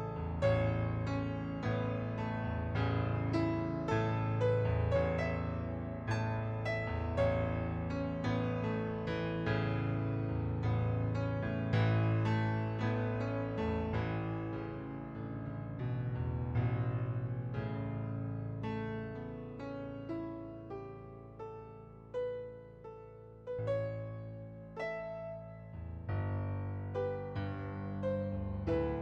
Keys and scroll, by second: 12.5 ctrl+d, 23.7 ctrl+d.